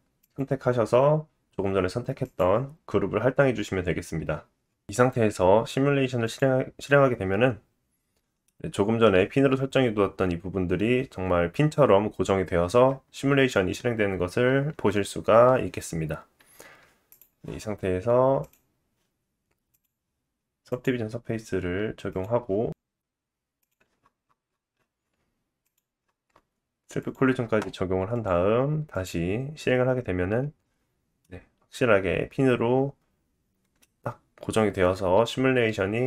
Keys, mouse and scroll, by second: 0.2 click, 3.3-6.2 drag, 4.6-6.2 scroll up 1, 7.5-8.2 scroll up 3, 8.2-9.3 drag, 8.2-9.3 middle drag, 8.2-9.3 right drag, 16.5 space, 17.2-18.4 drag, 18.5-22.7 drag, 23.6 click, 24.0-25.6 scroll down 6, 25.6 click, 26.0-26.7 scroll down 2, 27.0-28.1 drag, 27.0 middle click, 27.0 right click, 28.9 click, 31.3 middle click.